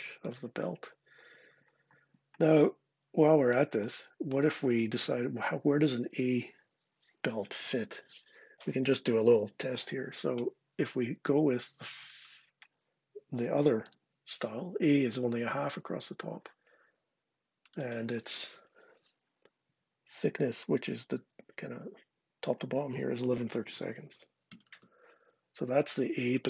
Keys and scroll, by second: 4.5 Escape, 13.2-13.6 typing, 14.9 Return, 23.3-24.9 typing.